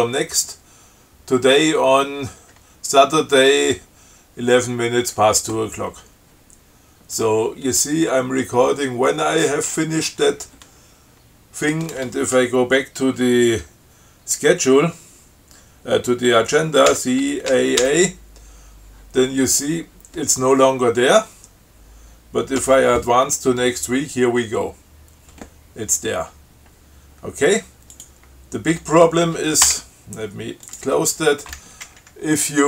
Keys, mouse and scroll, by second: 17.1 ctrl+c, 17.7 ctrl+a, 22.8 f, 28.2 click, 29.0 q, 29.9 BackSpace, 30.9 click, 31.1 q.